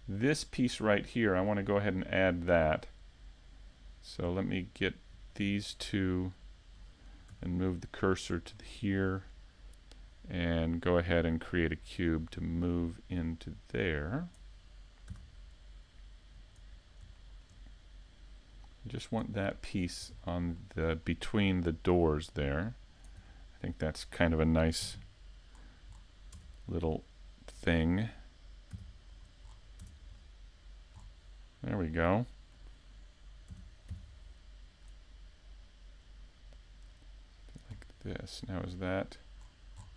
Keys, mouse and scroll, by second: 2.9 middle click, 4.4 shift+middle click, 4.7 scroll up 1, 5.1-5.6 scroll down 2, 5.5 middle click, 6.5 shift+middle click, 7.2 scroll up 1, 7.9 s, 8.8 shift+middle click, 12.6 scroll down 1, 13.0 middle click, 14.7 scroll down 1, 15.4 shift+middle click, 15.5 shift+middle click, 15.8 middle click, 16.7 shift+middle click, 18.9 middle click, 18.9-19.7 scroll up 4, 19.7 shift+middle click, 20.4-20.8 scroll up 1, 20.8 shift+middle click, 24.8-25.5 scroll down 1, 26.1-26.5 scroll down 2, 26.5 shift+middle click, 30.4 right click, 30.8 middle click, 33.1 scroll down 1, 33.5 shift+middle click, 38.3-38.9 scroll down 2, 38.7 shift+middle click, 39.3 a, 39.8 shift+middle click.